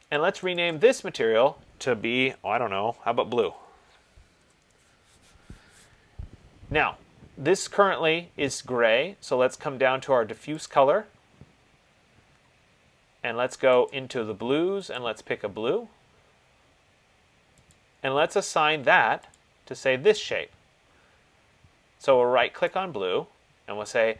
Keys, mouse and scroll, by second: 0.7 click, 0.9 click, 2.6 ctrl+a, 3.6-4.5 typing, 10.9 click, 14.1 click, 15.1 click, 18.0 click, 19.6 click, 22.9 right click.